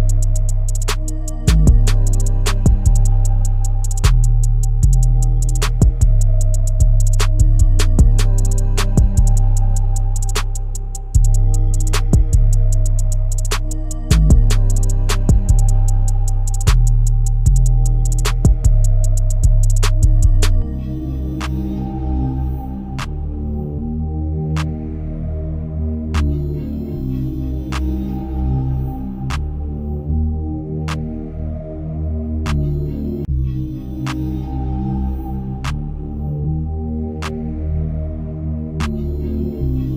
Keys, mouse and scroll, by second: 0.5-1.5 scroll down 2, 1.5 g, 3.9 r, 5.5 KP_0, 8.1 g, 14.0 KP_0, 16.8 KP_0, 18.8-22.9 drag, 22.9 KP_0, 25.2 KP_7, 28.1 shift+d, 30.4 r, 32.9 ctrl+z, 34.0 r, 37.3 click, 37.9 g.